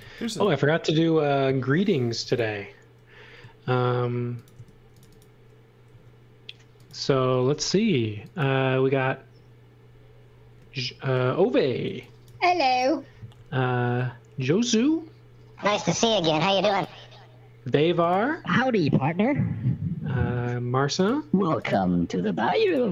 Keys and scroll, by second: 0.0-0.5 typing, 2.0 m, 4.5 space, 5.8 l, 11.8 x, 12.2 v, 13.3 l.